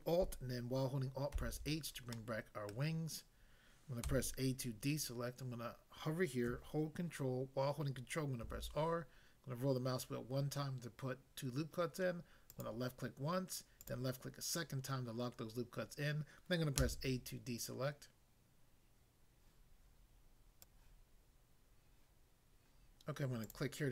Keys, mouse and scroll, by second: 1.4 alt+h, 2.1 middle click, 2.7 middle click, 4.1 a, 8.4 ctrl+r, 9.5 scroll up 1, 12.5 click, 13.8 click, 16.8 a, 20.5 click, 20.7 click, 23.4 click.